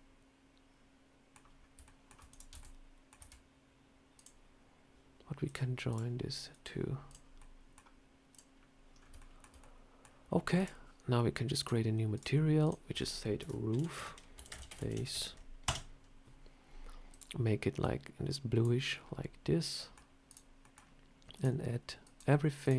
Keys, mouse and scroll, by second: 1.5 scroll up 1, 1.7 shift+middle click, 2.0 shift+scroll down 1, 2.2 click, 2.4 Tab, 2.5 middle click, 3.1 Tab, 4.1 click, 5.4 click, 5.8 click, 6.4 click, 7.0 click, 7.3 middle click, 8.2 click, 8.9 scroll up 2, 9.1 shift+middle click, 9.5 middle click, 10.5 click, 11.5 click, 12.0 click, 12.5 click, 13.9 o, 17.0 click, 19.7 middle click, 20.2 click, 20.5 middle click, 21.3 click, 22.5 click.